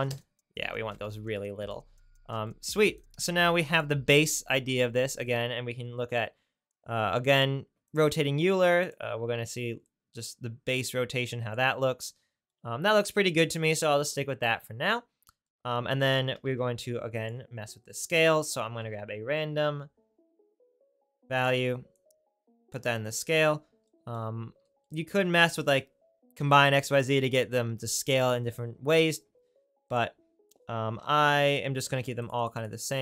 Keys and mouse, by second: 6.8-7.9 right drag, 7.9-8.9 drag, 8.9 right click, 9.9-14.9 drag, 16.4 shift+a, 21.4 click, 31.5 right click.